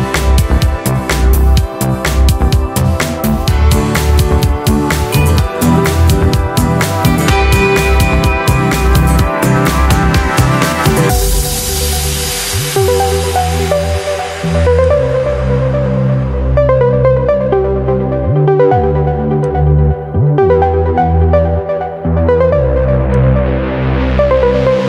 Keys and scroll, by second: 12.2 ctrl+0, 21.1 Delete.